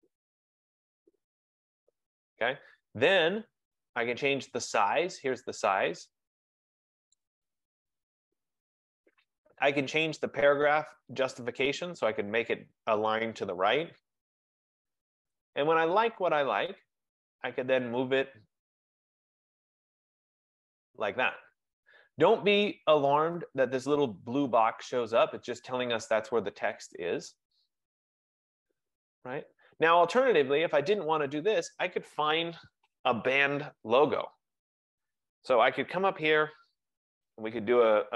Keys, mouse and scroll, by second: 1.5 click, 5.8 click, 7.3 click, 11.7 click, 15.6 click, 19.1 click, 29.4 click, 36.6 click.